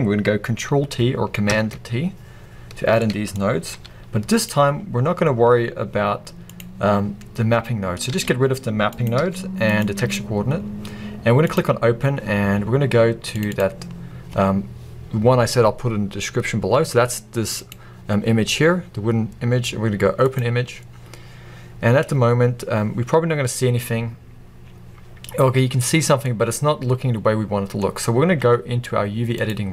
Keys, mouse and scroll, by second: 1.6 ctrl+t, 6.6 click, 9.7 click, 10.5 x, 12.3-24.6 drag, 22.4-23.6 scroll up 2, 23.6-24.1 scroll up 1, 24.1-24.6 scroll down 2, 24.6-26.1 scroll up 2, 26.1-26.9 scroll up 1, 26.9-29.7 middle drag.